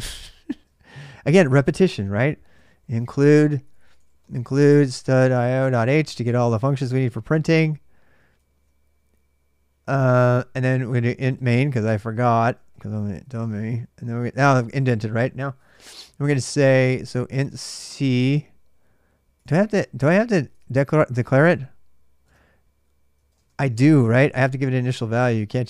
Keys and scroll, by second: 1.4-6.4 typing, 8.1 typing, 9.9-13.7 typing, 16.5-17.7 typing, 19.1 typing, 20.3 super+Tab, 22.0 super+Tab, 22.7-25.6 typing.